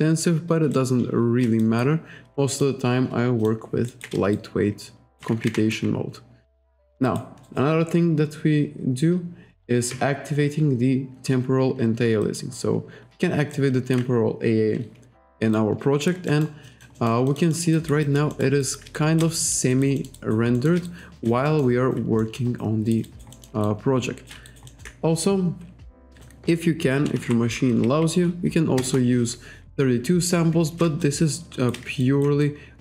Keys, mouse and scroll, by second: 0.8 shift+right click, 1.6 alt+right click, 2.5 click, 3.4 click, 3.9 alt+right click, 4.4 shift+right click, 5.5 alt+right click, 7.1 alt+right click, 7.5 alt+right click, 8.0-9.3 scroll down 1, 12.2 click, 13.6 alt+right click, 15.6 alt+right click, 16.3 alt+middle click, 16.7 alt+click, 17.3 alt+click, 17.7 alt+scroll up 1, 17.8 alt+right click, 18.3 alt+middle click, 18.6 alt+right click, 19.0 shift+right click, 19.4 alt+click, 19.7 alt+right click, 20.0 alt+middle click, 20.2 alt+right click, 20.6 alt+middle click, 20.9 shift+right click, 21.5 alt+middle click, 22.2 alt+middle click, 22.9 alt+right click, 23.3 alt+middle click, 23.7 shift+right click, 24.5 alt+right click, 24.7 alt+middle click, 26.0 click, 26.8-27.7 typing, 28.8 Return, 31.0 shift+right click, 32.0 alt+right click, 32.4 shift+right click.